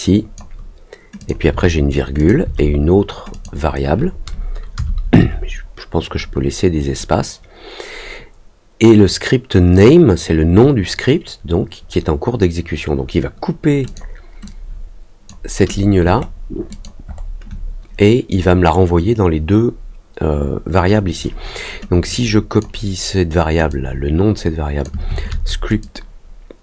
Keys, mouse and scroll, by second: 1.1 click, 2.1 click, 3.3 click, 13.8 click, 14.4 click, 16.1 ctrl+middle click, 16.6 ctrl+click, 17.0 ctrl+middle click, 22.0 click, 23.6-24.8 drag, 25.7-26.6 drag.